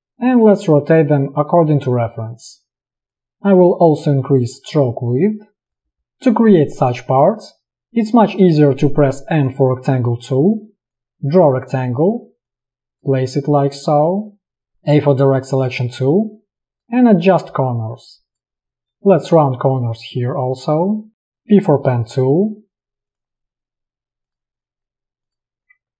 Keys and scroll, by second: 9.4 m, 12.0 v, 14.6 a, 21.2 p.